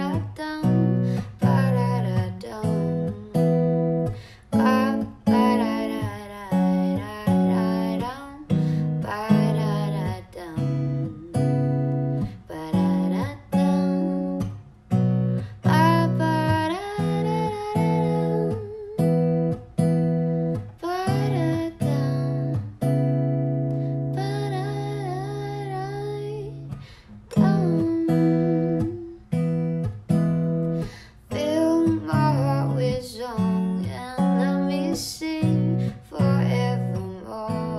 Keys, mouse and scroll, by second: 3.2 ctrl+v, 10.5 0, 16.4-17.3 typing.